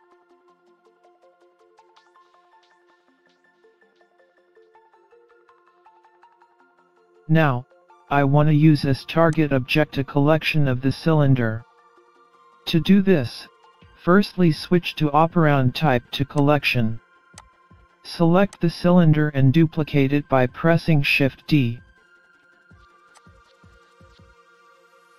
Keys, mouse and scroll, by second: 0.7-1.0 scroll up 2, 1.0 middle click, 4.2-4.6 scroll down 4, 4.7-5.4 scroll up 2, 5.4-6.2 scroll down 2, 6.4-7.7 scroll down 2, 7.7 scroll up 2, 8.2 middle click, 12.6 click, 19.7 click, 20.7 click, 24.2-25.1 scroll down 3, 24.7-25.1 scroll up 2.